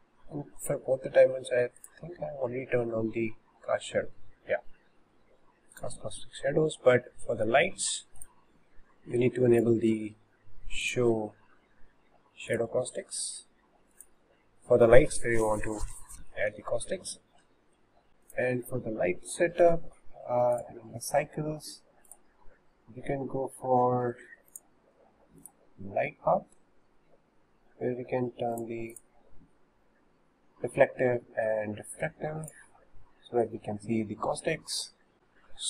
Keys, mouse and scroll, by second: 1.8-4.9 drag, 5.7-7.1 drag, 7.1-8.2 middle drag, 8.2 click, 10.9 click, 12.5 click, 14.0 click, 18.1 KP_0, 18.3 click, 20.6 click, 22.1 click, 24.5-28.6 drag, 29.0 click, 32.5-35.1 drag.